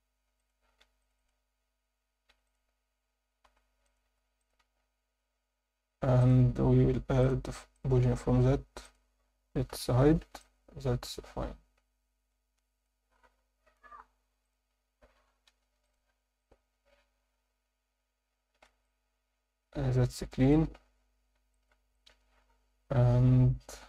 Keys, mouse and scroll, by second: 0.4 click, 0.8 ctrl+r, 1.1 click, 2.3 3, 2.4 click, 3.8 click, 4.1 i, 4.6 Tab, 6.2 click, 7.2 click, 8.8 click, 9.7 h, 10.4-12.8 alt+middle drag, 14.4 click, 14.7 Tab, 15.4 ctrl+r, 16.4 click, 17.5 Tab, 18.3 scroll down 2, 18.5 alt+a, 18.8-20.5 alt+middle drag, 20.9-21.4 scroll down 3, 21.5 alt+shift+middle drag, 21.9-23.8 alt+middle drag.